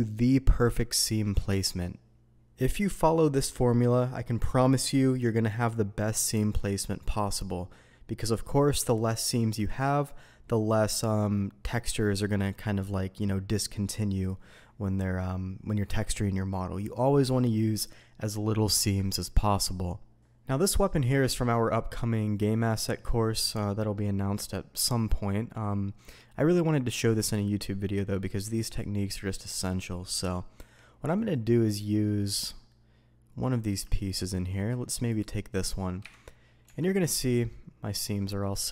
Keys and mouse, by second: 20.7-21.4 middle drag, 21.9 middle click, 25.1-25.9 middle drag, 28.1-29.4 middle drag, 30.5 z, 31.1-32.0 middle drag, 32.7-33.6 middle drag, 34.0-34.5 shift+drag, 36.0 KP_Divide, 36.6 Tab, 37.5-38.2 middle drag.